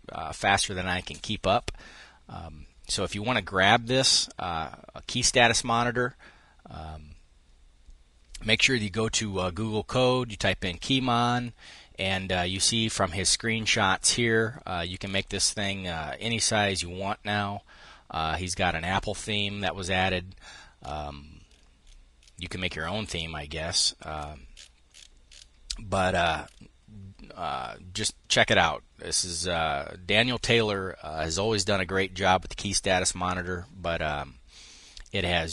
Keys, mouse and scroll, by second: 12.1 click, 12.5 click.